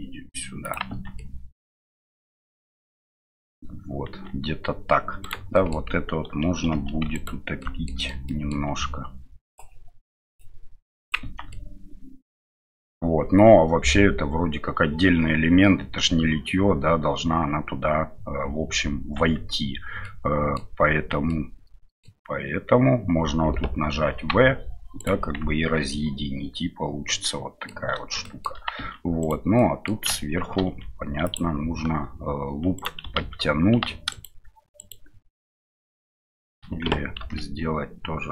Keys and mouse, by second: 0.9 Tab, 1.2-2.9 middle drag, 4.0 Tab, 5.2 alt+right click, 5.7 middle click, 7.0 2, 7.1 alt+click, 7.6 alt+middle click, 8.0 middle click, 8.2 middle click, 9.5-11.1 drag, 11.2 Tab, 11.5-12.3 middle drag, 19.1 Tab, 20.0 middle click, 21.3 middle click, 25.4 Tab, 25.9-27.7 middle drag, 28.2 shift+middle drag, 28.8 Tab, 29.2 right click, 29.6 middle click, 30.6 ctrl+r, 33.2 ctrl+z, 33.7 alt+middle click, 34.1 alt+right click, 34.2 alt+shift+middle click, 34.8 alt+shift+right click, 34.9 alt+shift+middle click, 35.6 alt+shift+right click, 36.3 alt+shift+right click, 36.6 middle click.